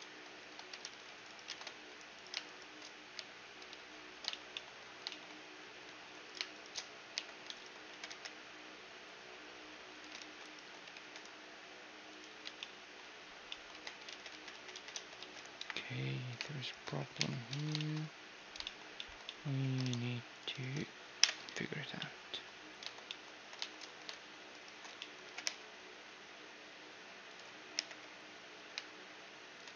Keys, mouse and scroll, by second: 0.4 ctrl+r, 0.6 scroll up 1, 0.8 middle click, 1.1 ctrl+Tab, 1.8-3.9 right drag, 2.8 j, 3.3 a, 3.5-6.7 middle drag, 5.8-8.9 right drag, 6.7 j, 7.5 g, 9.8 ctrl+r, 10.5 ctrl+r, 10.5-12.0 right drag, 12.0 Tab, 12.2-15.5 middle drag, 13.4 Tab, 13.9 ctrl+z, 14.3 ctrl+z, 14.5 ctrl+z, 14.8 ctrl+z, 15.2 KP_1, 16.2-18.3 right drag, 16.8 j, 17.1 a, 17.4 click, 17.9-20.7 middle drag, 19.4 ctrl+Tab, 20.2-22.2 right drag, 21.0 ctrl+l, 21.6-26.4 middle drag, 21.8 click, 23.2 z, 24.1-26.0 right drag, 24.6 z, 24.8 g, 27.4 i, 29.4 ctrl+e.